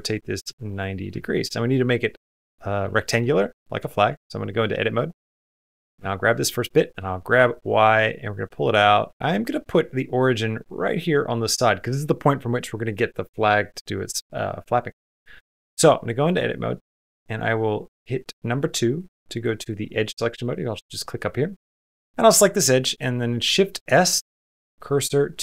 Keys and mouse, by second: 0.0 middle click, 0.3 shift+middle click, 0.6 middle click, 1.0 shift+middle click, 2.8 shift+middle click, 3.2 middle click, 3.9 Tab, 4.6 middle click, 4.9 click, 5.3 2, 5.5 click, 5.9 shift+middle click, 6.3 middle click, 6.8 g, 8.7 shift+middle click, 9.0 g, 15.6 Tab, 16.8 2, 23.3 shift+s.